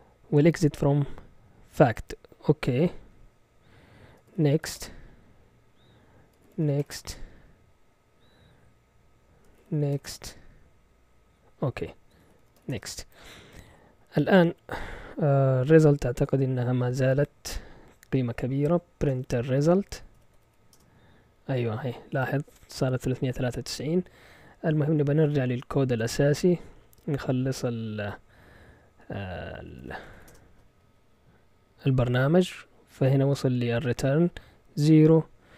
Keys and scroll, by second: 3.9-5.1 typing, 6.2-8.1 typing, 9.3-10.4 typing, 11.9-13.0 typing, 18.8-20.9 typing, 29.4-30.6 typing.